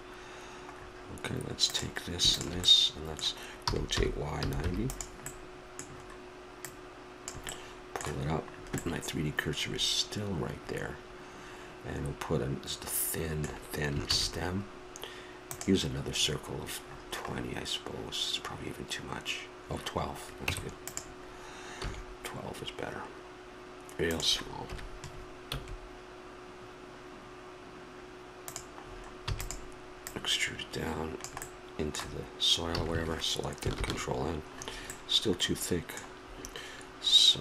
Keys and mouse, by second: 1.7-4.9 drag, 3.6 r, 6.6 middle click, 7.2-8.4 drag, 8.4-10.7 middle drag, 14.0 shift+a, 20.4 Tab, 21.8 s, 24.6 KP_Decimal, 25.5 s, 29.2 e, 30.0-31.9 drag, 31.4 middle click, 32.7 a, 32.9 a, 33.7 ctrl+n.